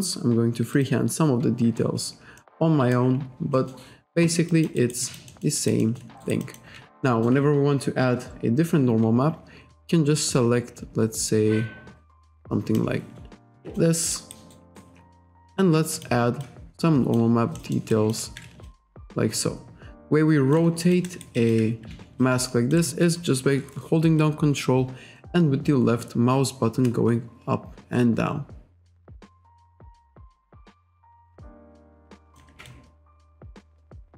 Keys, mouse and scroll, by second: 0.8 click, 2.5 middle click, 3.3-3.6 scroll up 1, 3.6 middle click, 4.6 alt+click, 4.8 alt+right click, 5.1 alt+click, 5.7 alt+right click, 5.9 alt+middle click, 6.3 alt+right click, 7.1 alt+middle click, 8.0-8.4 scroll down 1, 12.8 click, 14.2 alt+right click, 14.6 alt+right click, 16.0 click, 16.5 alt+click, 17.6 alt+middle click, 18.0 alt+click, 18.7 ctrl+click, 20.9 alt+click, 22.3 ctrl+click, 24.3 ctrl+click, 29.9 ctrl+click, 31.4 ctrl+click, 32.7 ctrl+click, 33.9 click.